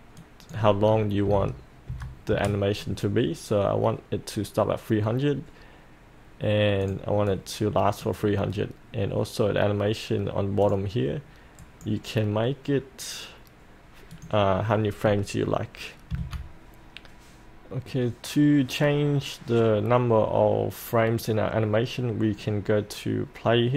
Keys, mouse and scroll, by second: 0.2 click, 1.2 KP_3, 1.3 KP_0, 6.8 click, 11.6 right click, 14.1-15.2 drag, 16.1 F8.